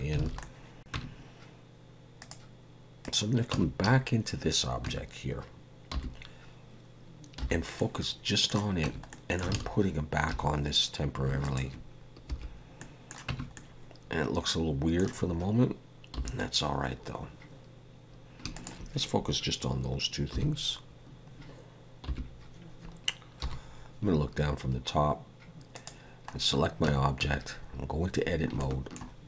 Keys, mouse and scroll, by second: 0.2 alt+a, 0.4 middle click.